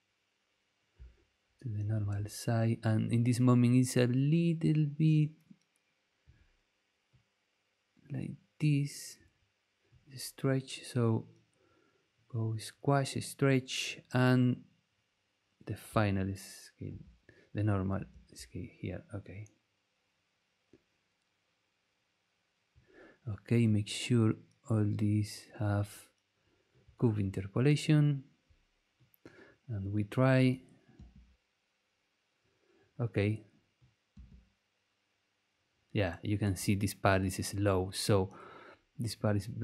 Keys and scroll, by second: 1.8 super+v, 16.8 super+c, 17.9 super+v, 30.9 space, 34.1 space.